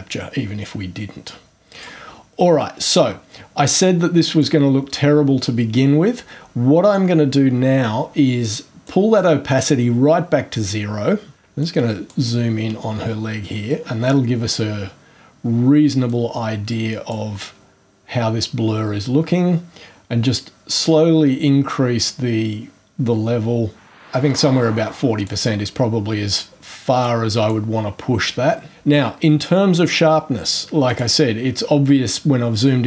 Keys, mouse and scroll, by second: 1.7 click, 2.7 scroll down 2, 3.8-4.6 drag, 8.8-9.3 drag, 11.6 ctrl+click, 16.1-17.3 drag, 22.0-25.4 drag, 27.0-27.7 drag, 30.9 click.